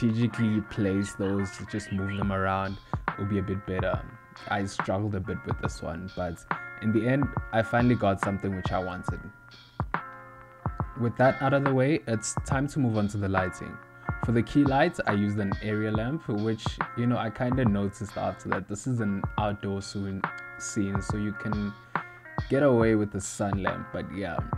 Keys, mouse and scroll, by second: 1.3 click, 4.9 KP_1, 6.8 middle click, 11.0 shift+a, 13.8 g, 15.2 click, 18.2 r, 18.9 g, 19.4 KP_7, 19.9 ctrl+middle click, 20.4 click, 21.2 g, 21.6 click, 23.4 ctrl+middle click, 23.7 r, 24.1 g.